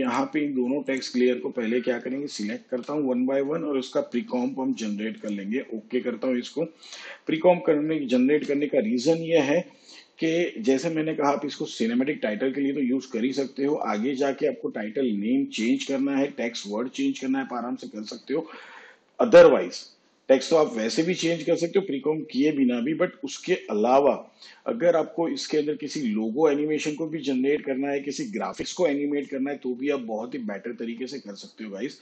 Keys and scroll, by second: 2.4 ctrl+shift+c, 8.1 ctrl+shift+c.